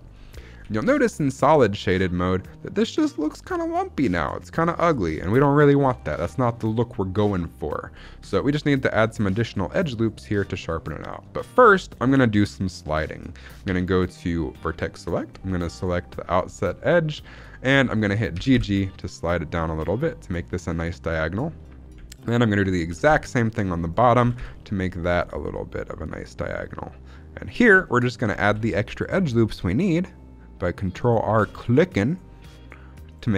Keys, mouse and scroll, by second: 0.0-0.5 scroll up 3, 0.5 z, 0.9 middle click, 1.3-1.6 scroll down 1, 1.6 middle click, 4.4 scroll down 2, 5.2 KP_1, 5.9 shift+middle click, 6.1-7.0 scroll up 3, 7.2-8.3 shift+middle drag, 8.3 scroll up 2, 9.0 shift+middle click, 10.0 scroll up 1, 10.6 shift+middle click, 13.6 1, 15.5 alt+click, 18.2 g, 18.5 g, 19.7 click, 22.3 alt+click, 23.1 g, 23.8 right click, 24.1 g, 24.4 g, 27.4 click, 27.7 shift+middle click, 27.9 scroll up 1, 28.3 ctrl+r, 30.9 click, 31.3 ctrl+r, 33.0 click, 33.2 scroll down 2.